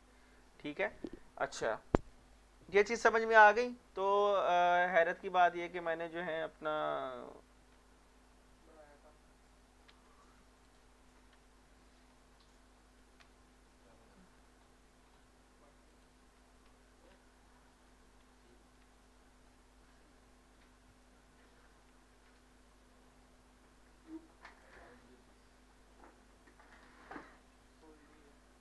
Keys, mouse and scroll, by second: 5.0 click, 7.7 Home, 9.9 Insert, 10.7 click, 11.3 Insert, 12.1-13.2 scroll down 1, 13.2 Page_Up, 15.9 click, 16.8 Escape, 18.3 z, 18.8 z, 19.5 z, 21.1-21.8 typing, 24.6 click, 27.3 right click.